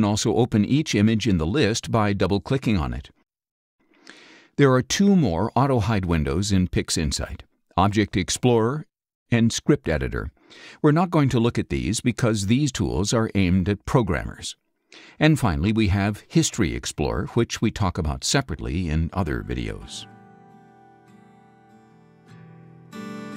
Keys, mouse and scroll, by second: 0.5 click, 1.7 click.